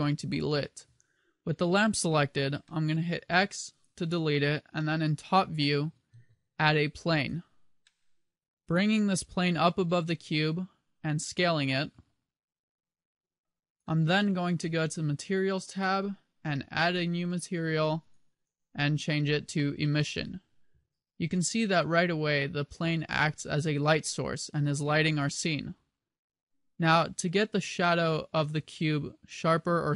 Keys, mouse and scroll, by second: 2.8 middle click, 3.4 x, 3.9 middle click, 3.9 x, 4.9 KP_7, 5.6 shift+a, 7.9 middle click, 9.1 g, 11.3 click, 11.8 s, 13.8 click, 14.5 click, 16.8 click.